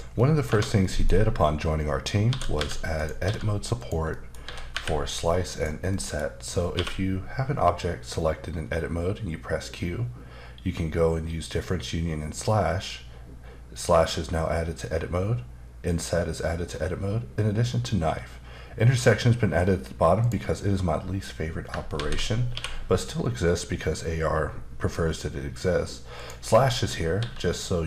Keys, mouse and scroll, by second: 0.1 middle click, 0.4 Tab, 0.8 middle click, 2.3 shift+d, 3.0 click, 3.2 s, 3.8 click, 4.1 middle click, 4.4 typing, 5.9 middle click, 6.7 q, 20.2 click, 21.9 ctrl+z, 26.1 click, 26.7 middle click, 27.2 s.